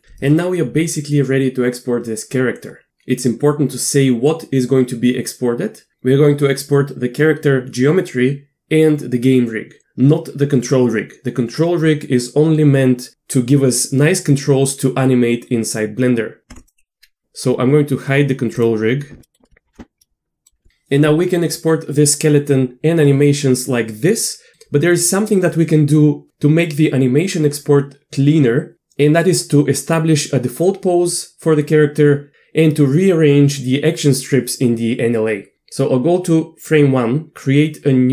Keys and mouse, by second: 16.6 click, 16.8 Tab, 19.2 click, 20.2 middle click, 35.5 click.